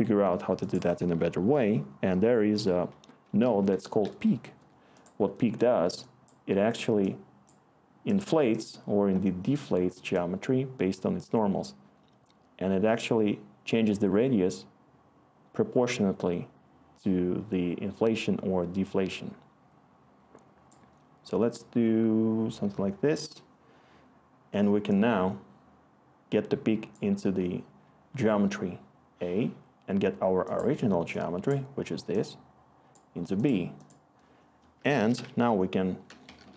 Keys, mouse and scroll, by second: 2.5 Tab, 3.0-4.1 typing, 4.4 Return, 34.7-36.0 typing.